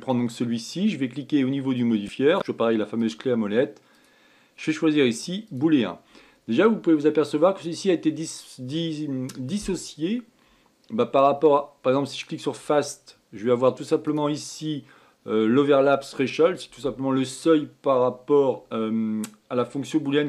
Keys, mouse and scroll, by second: 2.1-3.6 drag, 4.4-7.4 drag, 12.6 click, 14.5-17.7 drag.